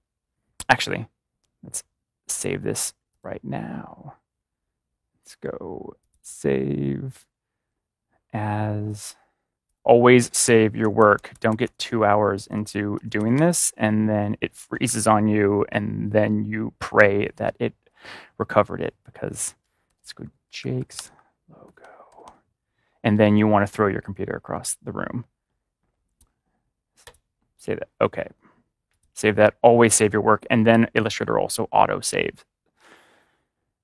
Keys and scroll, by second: 10.7 ctrl+=, 10.8-13.6 typing, 19.9-22.2 typing.